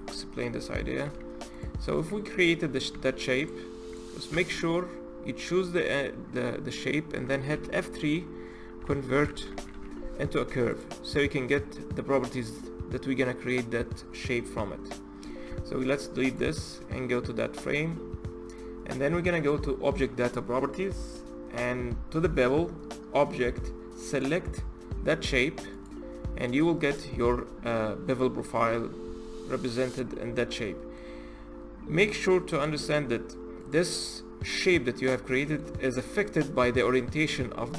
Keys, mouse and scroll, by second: 0.8 e, 1.7 e, 2.7 e, 3.7 click, 4.1 Tab, 7.3 F3, 15.3 x, 16.1 click, 16.3-17.4 scroll up 7, 17.4 click, 23.9 click, 26.2-26.7 scroll down 3, 26.7 click, 26.9-27.2 scroll down 3, 27.2-27.6 scroll up 1, 27.6-28.5 middle drag, 28.5-28.8 scroll up 2, 28.8 z, 29.6 drag, 29.9-30.4 scroll up 3, 30.4-31.0 middle drag, 31.0-31.8 scroll up 3, 31.8-32.3 middle drag, 32.3 click, 33.4 click, 35.1-37.7 middle drag.